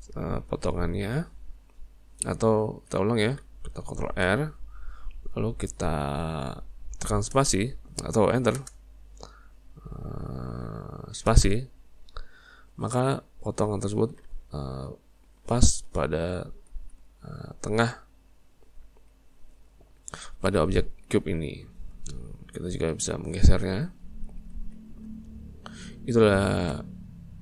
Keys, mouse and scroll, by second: 2.7 ctrl+z, 4.1 ctrl+r, 13.2-16.2 middle drag, 16.2 z, 17.3-19.7 middle drag, 19.7 click, 21.1 middle click, 21.7 shift+click, 22.2 middle click, 23.1 click, 24.6 ctrl+z, 25.7 Tab.